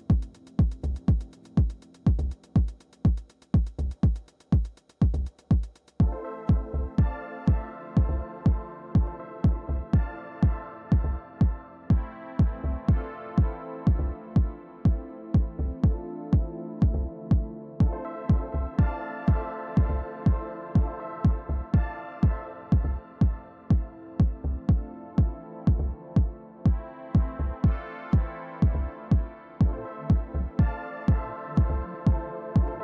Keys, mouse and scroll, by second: 0.0-3.9 typing, 4.4 Return, 9.6 right click, 10.6 click, 11.3 click, 14.1-16.1 drag, 16.0-17.1 right drag, 17.8 click, 22.2-27.5 drag, 28.4 click, 31.8 click.